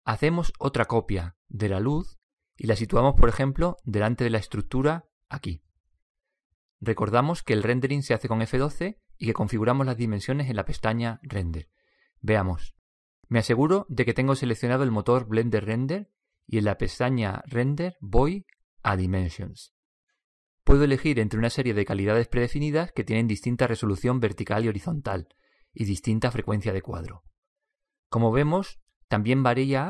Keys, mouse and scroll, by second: 0.5 right click, 1.8 shift+d, 9.8 F12, 16.7-18.9 drag, 19.7 click, 22.4 click, 27.4-29.8 drag.